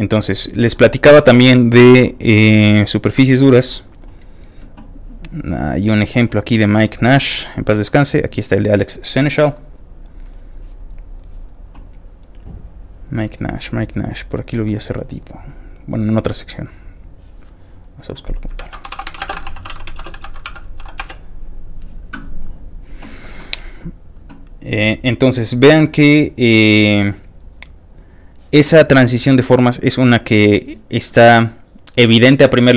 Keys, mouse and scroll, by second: 3.2 click, 5.4-6.2 scroll down 4, 7.4-7.8 scroll down 2, 7.8 middle click, 10.8-11.1 scroll up 3, 11.9 middle click, 12.3 middle click, 13.0 middle click, 13.4 middle click, 13.5 scroll up 1, 13.6 middle click, 13.7 middle click, 14.1 middle click, 16.1-16.9 scroll down 2, 16.9 middle click, 18.0 click, 18.5 scroll down 1, 18.6 ctrl+a, 18.7-20.7 typing, 21.0 Return, 22.4-30.4 drag, 23.9 middle click, 24.2-24.7 scroll down 3, 25.0-26.6 scroll down 4, 27.3 scroll up 1, 27.9 scroll down 1, 29.1 scroll up 2.